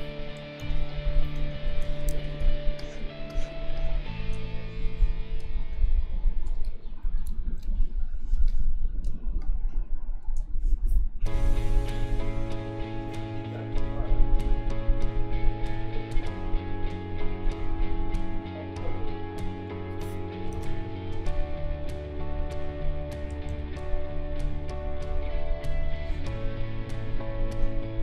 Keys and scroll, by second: 0.6 ctrl+z, 1.4 ctrl+=, 2.4 space, 7.2 ctrl+u, 20.5 ctrl+z, 23.5 ctrl+z.